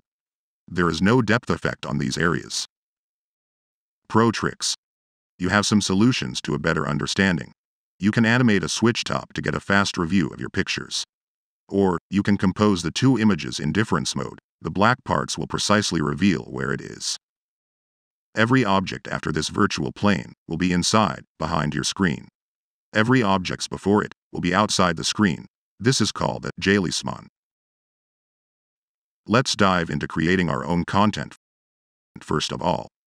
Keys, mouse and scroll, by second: 11.8 click, 12.8-19.7 middle drag, 20.5 click, 21.6 click, 22.2-26.3 middle drag.